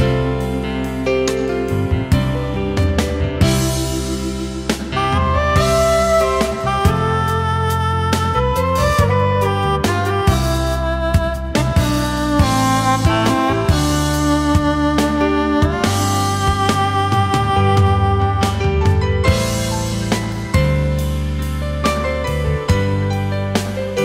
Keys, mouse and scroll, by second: 0.0 space, 3.0 ctrl+z, 3.8-4.9 alt+scroll up 1.